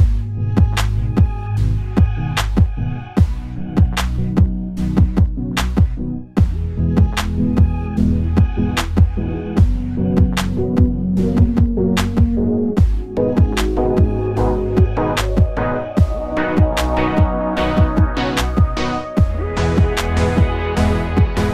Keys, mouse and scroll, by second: 0.5 click, 0.9-2.0 alt+drag, 2.0 e, 9.0 s, 9.9 click, 10.0 ctrl+z, 11.8 click, 13.3 e, 17.2 s, 18.7 click.